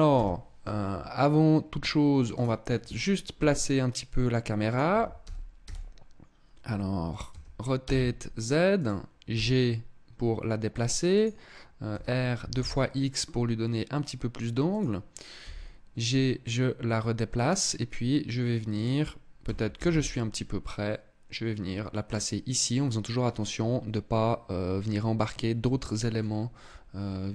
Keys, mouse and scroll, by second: 1.9 right click, 2.9 g, 4.5 click, 4.5 r, 6.9 r, 8.5 click, 8.9 g, 10.8 click, 11.5 r, 14.3 click, 14.9 g, 18.6 click, 19.0 g, 21.9 click.